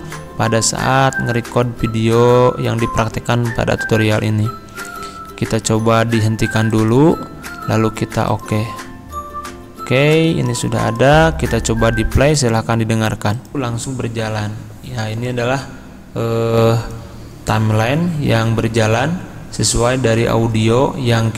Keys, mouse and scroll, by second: 6.8 click.